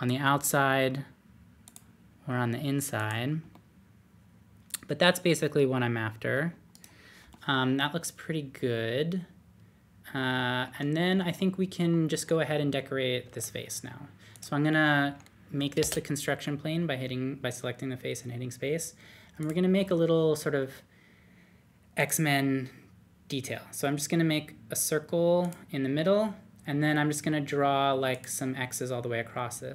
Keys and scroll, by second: 13.2 3, 15.8 typing.